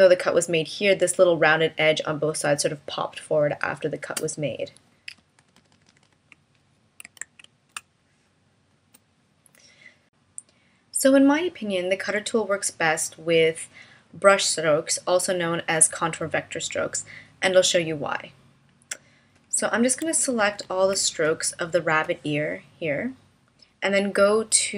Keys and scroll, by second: 7.2 super+z, 7.7 space.